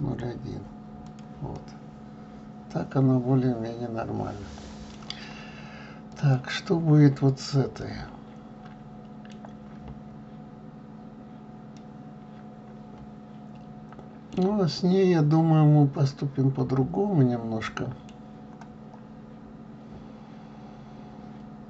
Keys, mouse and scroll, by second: 0.2-1.6 drag, 1.6-4.6 middle drag, 6.3 click, 7.9-17.8 middle drag.